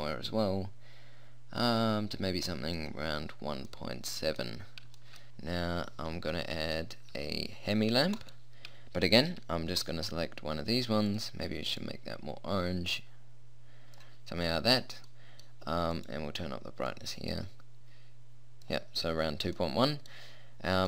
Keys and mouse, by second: 4.5 click, 5.8 middle click, 7.2 middle click, 8.3-10.0 right drag, 10.0-11.2 middle drag, 11.2-14.6 drag, 16.0-18.5 right drag, 17.0-18.5 drag, 19.8-20.8 middle drag.